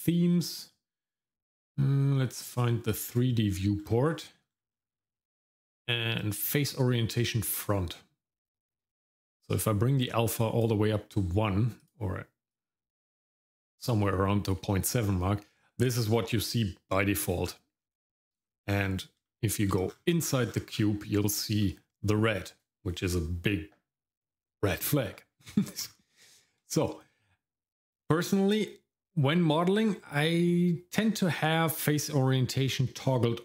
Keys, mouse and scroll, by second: 18.7-19.2 scroll up 2, 19.2 shift+middle click, 19.9-21.6 scroll up 8, 21.6 middle click, 25.6-26.3 scroll down 4, 26.3 shift+middle click, 26.8 middle click.